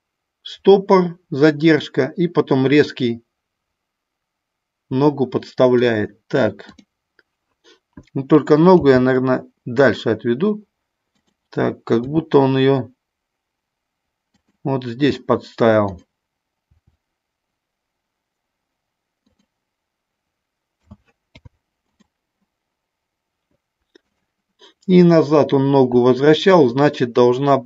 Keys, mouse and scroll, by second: 6.6 click, 8.7 g, 11.2 click, 12.1 r, 14.4 click, 15.7 click, 16.7 r, 20.9 a, 21.2 i.